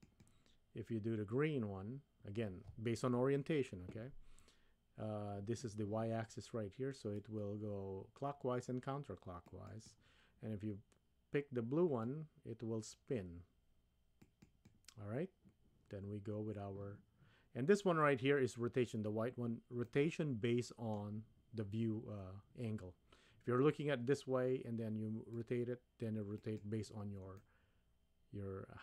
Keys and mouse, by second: 7.1-9.9 drag, 12.0-14.7 drag, 19.8-21.0 middle drag, 25.3-26.6 drag, 27.4-28.8 middle drag.